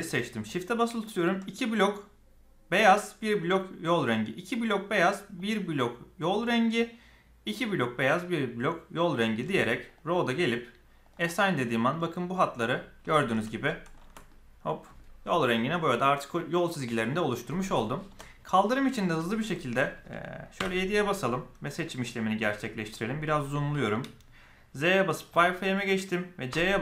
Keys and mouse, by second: 5.3 shift+click, 7.6 shift+click, 9.9 click, 11.0 click, 12.6-13.3 middle drag, 13.6 middle click, 14.2 Tab, 14.2-14.9 middle drag, 17.3 middle click, 18.0 Tab, 18.5 middle click, 19.1 shift+middle drag, 20.5 KP_7, 22.6 shift+click, 26.4 c.